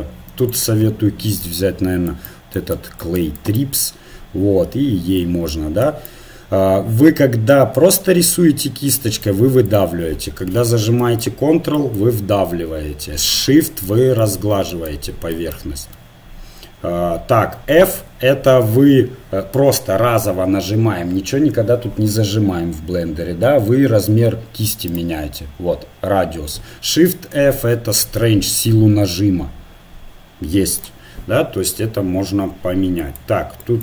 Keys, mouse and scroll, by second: 4.5 middle click, 4.5-7.5 right drag, 9.0-15.7 drag, 15.8-17.6 drag, 17.1-18.7 middle drag, 18.0 f, 27.4 shift+f.